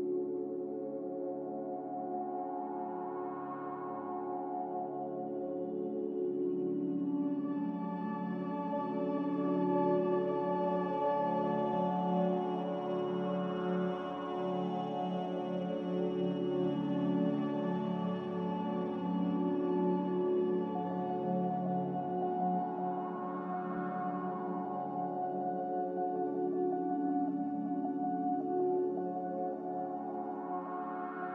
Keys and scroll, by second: 11.2-12.0 typing.